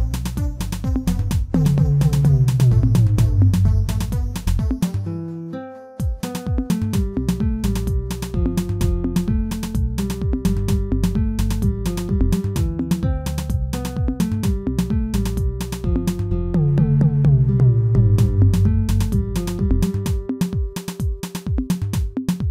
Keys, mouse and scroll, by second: 0.7 alt+click, 1.3-3.0 shift+middle drag, 3.0 alt+shift+click, 3.8-5.0 shift+middle drag, 5.0 shift+click, 5.9 shift+click, 7.3 shift+click, 10.9 ctrl+e, 11.9 3, 12.0 click, 13.1 ctrl+l, 13.6 Tab, 14.3 ctrl+a, 15.5 Tab, 16.0-16.4 scroll down 1, 16.4 u.